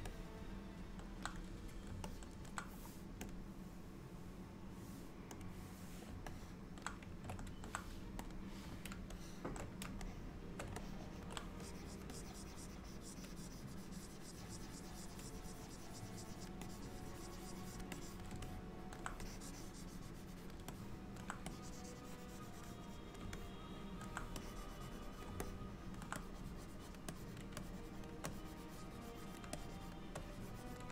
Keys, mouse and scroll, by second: 0.2 middle click, 2.1 middle click, 3.4 click, 5.5 click, 6.4 middle click, 8.4 click, 9.2 shift+middle click, 10.1 shift+middle click, 10.9 ctrl+middle click, 11.7 click, 12.2 click, 16.7 click, 18.0 click, 18.5 alt+middle click, 19.3 click, 20.8 alt+middle click, 21.6 click, 23.4 alt+middle click, 24.5 click, 25.5 middle click, 26.3 click, 27.2 click, 27.7 shift+click, 28.2 shift+click, 28.4 click, 29.6 shift+click, 30.3 click.